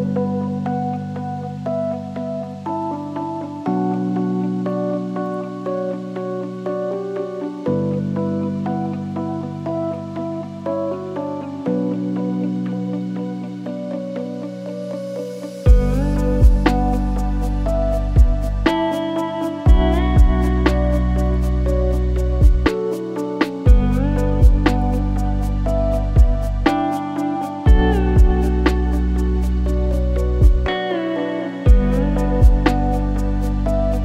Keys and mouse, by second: 6.3 middle click, 8.6 middle click, 13.8 click, 15.0 click, 15.4-16.3 drag, 17.8 g, 24.0 middle click, 24.2-25.5 shift+middle drag, 28.1 ctrl+p, 29.5 click, 30.4-30.8 shift+middle drag, 31.2-31.7 drag, 31.7 r.